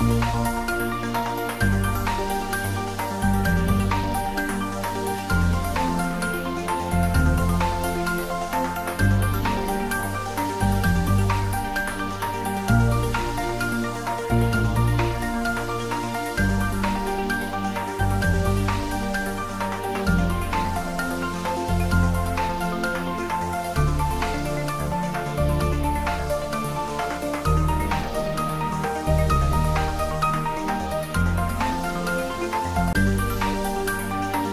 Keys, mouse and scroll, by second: 0.5-2.6 drag, 2.6 3, 3.2 click, 6.2 scroll up 1, 6.8 shift+z, 7.4 click, 8.6 click, 9.5 middle click, 10.7 click, 11.2-11.6 scroll down 1, 11.6 middle click, 12.4-13.2 scroll down 1, 13.2-14.8 drag, 14.8 g, 15.2 z, 16.2 click, 16.6 middle click, 17.5-17.8 scroll up 1, 17.8 middle click, 18.8 g, 19.1 z, 19.8 click, 19.8 g, 20.2-20.8 scroll down 1, 20.9 shift+z, 23.7 e, 26.0 click, 27.4 click, 27.9 s, 31.7 click, 32.3-33.5 scroll down 1, 33.6-34.5 middle drag.